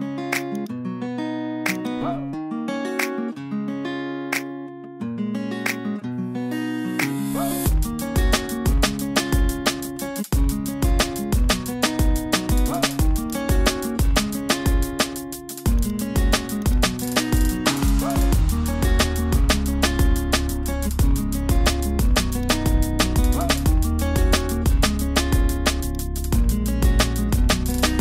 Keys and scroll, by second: 11.8 super+t.